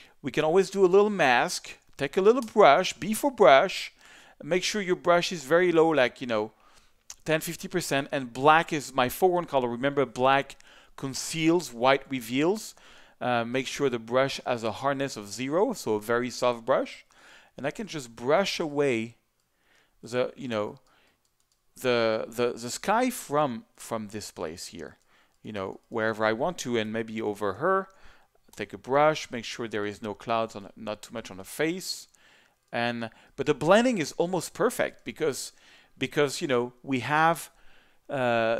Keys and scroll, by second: 2.4 b, 26.8 z, 28.5 b, 29.1 alt+b, 34.8 z.